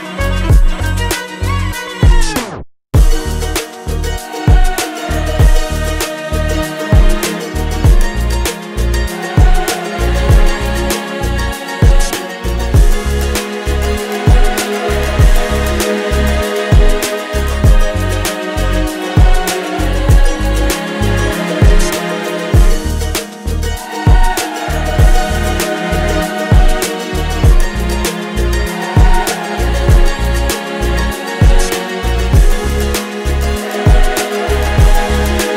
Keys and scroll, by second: 0.0-1.1 typing, 2.1 Return, 9.6 g, 10.0 a, 11.6-15.4 typing, 16.4 p, 20.7 Return.